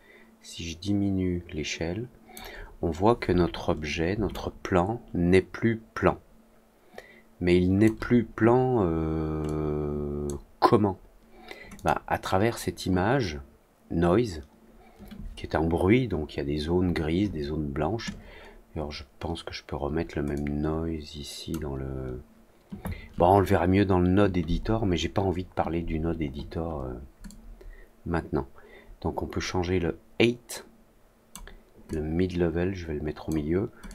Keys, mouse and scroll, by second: 4.2-7.8 alt+drag, 9.4 click, 11.7 click, 20.3-21.4 drag, 27.2-31.2 drag, 31.8 click, 33.8-33.9 drag.